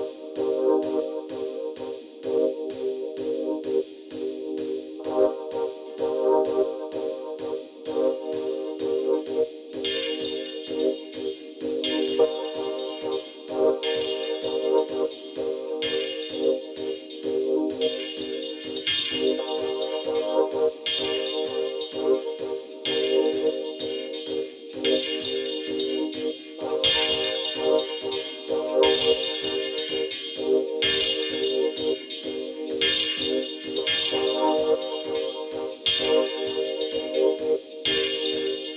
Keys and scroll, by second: 15.9 space, 17.3 space, 19.8 space, 21.1 space, 36.5 space.